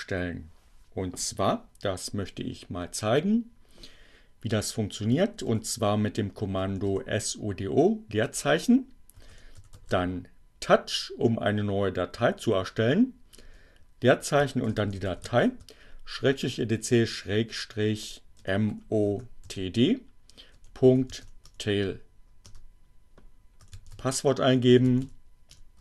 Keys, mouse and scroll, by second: 4.6-5.8 typing, 6.9 o, 7.6 space, 7.9 t, 9.1-10.4 typing, 12.6 space, 14.3-15.8 typing, 17.4-21.5 typing, 21.7 Return, 22.8-25.3 typing, 25.4 Return.